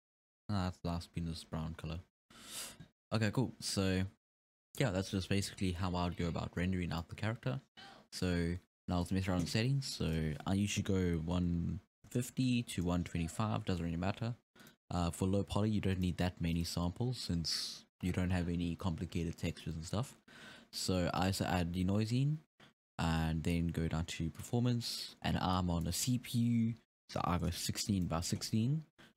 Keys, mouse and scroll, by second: 2.2-2.6 scroll down 1, 2.6-3.2 scroll up 4, 3.2 scroll down 1, 4.0-4.6 scroll down 1, 6.9-9.1 drag, 10.1-14.7 drag, 15.9 click, 16.5-19.7 drag, 21.2 click, 22.5-23.1 scroll down 3, 23.1-23.8 scroll down 9, 24.4-24.8 drag, 24.8-25.5 scroll down 5, 25.5-28.0 drag.